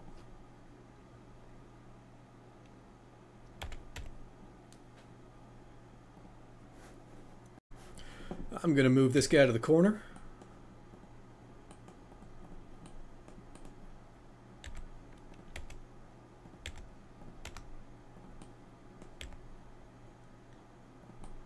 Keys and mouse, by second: 10.9 click, 12.2 click, 21.2-21.4 middle drag.